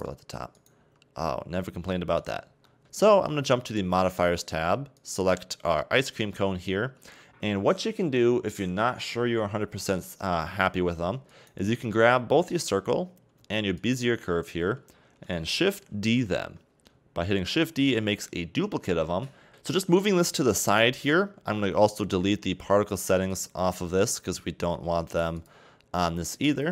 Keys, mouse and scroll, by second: 0.5 right click, 0.8 g, 2.6 middle click, 2.8 Tab, 3.8 click, 5.0 right click, 7.1 scroll down 1, 11.3 shift+right click, 12.5 click, 13.8 shift+click, 14.9-15.4 scroll down 1, 15.9 shift+g, 17.9 shift+d, 19.9 g, 23.0 right click, 23.3 right click, 25.4 click, 26.4 click.